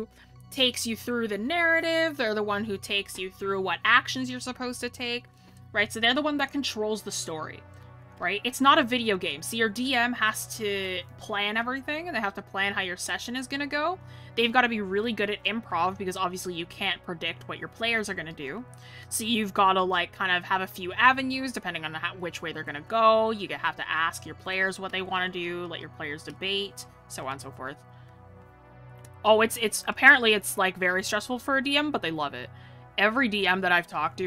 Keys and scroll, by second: 10.2 ctrl+z, 27.4 scroll.